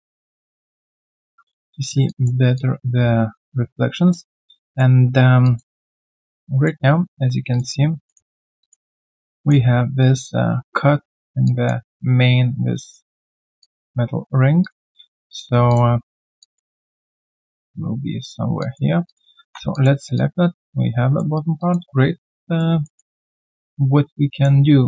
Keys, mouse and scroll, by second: 0.2 alt+click, 2.1 alt+click, 4.3 alt+scroll down 1, 4.5 alt+click, 5.8 alt+click, 8.0 middle click, 8.6 alt+click, 8.8 alt+right click, 9.1 alt+click, 9.3 alt+middle click, 11.4 alt+click, 13.6 alt+click, 14.9 middle click, 15.3 alt+click, 15.7 alt+click, 19.4 ctrl+1, 19.7 alt+click, 21.3 alt+right click, 21.6 alt+click, 22.1 right click, 22.1 q, 22.8 alt+middle click, 23.1 alt+right click, 23.4 alt+click, 24.7 right click.